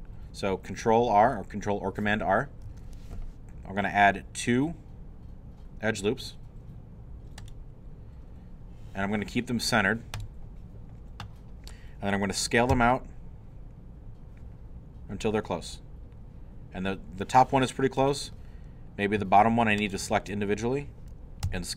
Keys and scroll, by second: 2.7 ctrl+r, 12.7 s, 21.4 s.